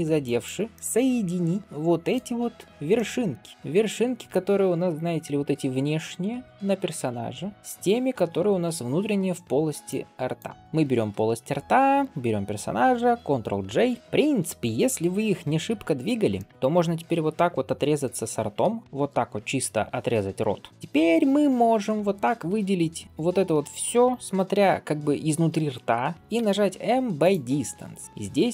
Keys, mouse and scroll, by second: 0.1 click, 0.5-0.9 scroll up 4, 0.7-2.2 middle drag, 2.2-3.2 scroll down 3, 2.8 middle click, 3.3-3.8 scroll down 3, 3.5-4.2 middle drag, 4.2 Tab, 4.6-5.3 drag, 5.3-6.3 middle drag, 6.6-7.0 shift+drag, 7.0 shift+middle drag, 7.5-8.1 scroll down 2, 9.0-9.3 scroll down 1, 9.3 scroll up 1, 9.7-10.6 drag, 10.6 scroll up 1, 11.8 shift+click, 14.0 middle click, 14.0 scroll down 1, 15.6 alt+b, 15.9-16.2 scroll down 2, 16.2 middle click, 18.5 KP_3, 18.8 alt+b, 20.4 scroll up 2, 20.7 middle click.